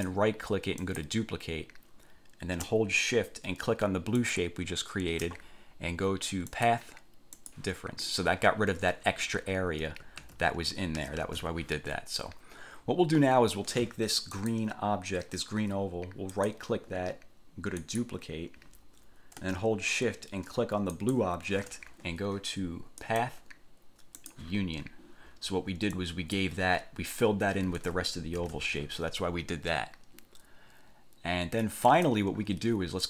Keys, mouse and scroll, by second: 0.1 click, 1.0 click, 4.3 shift+click, 6.7 click, 7.5 click, 10.3 ctrl+z, 11.3 ctrl+shift+z, 14.5 click, 16.5 click, 17.9 click, 21.1 shift+click, 23.2 click, 24.3 click, 26.1-26.7 drag, 28.6 ctrl+z, 32.1 click.